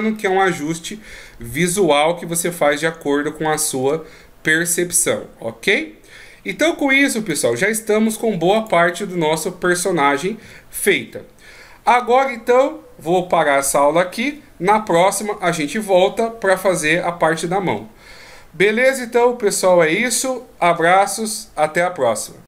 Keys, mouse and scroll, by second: 0.1 middle click, 1.7 KP_1, 2.6 scroll down 2, 4.0-4.7 ctrl+scroll down 2, 5.0-5.8 shift+scroll down 2, 7.3 click.